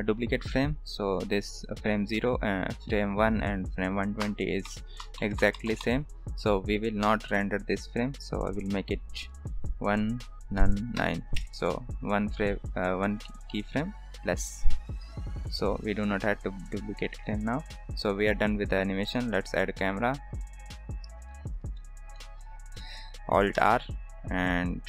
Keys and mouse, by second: 4.3 shift+Right, 4.8 shift+Left, 5.1 shift+Right, 5.3 shift+Left, 5.5 shift+Right, 5.6 shift+Left, 5.7 shift+Right, 5.9 shift+Left, 7.1 shift+Right, 9.3-12.1 drag, 14.9 ctrl+s, 15.6-17.2 drag, 17.4 ctrl+s, 17.9 shift+a, 21.7 shift+middle drag, 22.1 middle drag, 23.5 alt+r.